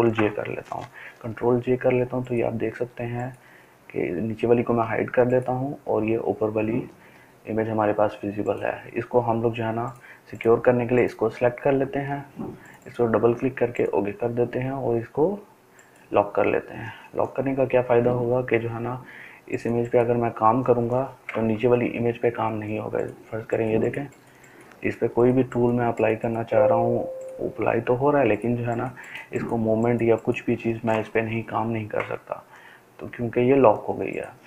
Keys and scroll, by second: 21.5 ctrl+z.